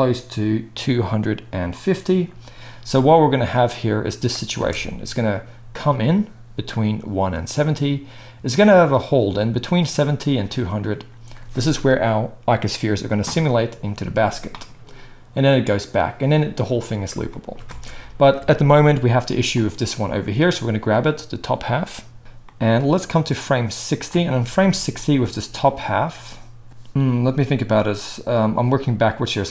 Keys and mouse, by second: 2.1-3.4 middle drag, 3.4-19.6 drag, 4.5 space, 17.7 space, 19.6-23.1 middle drag, 23.1-29.5 drag.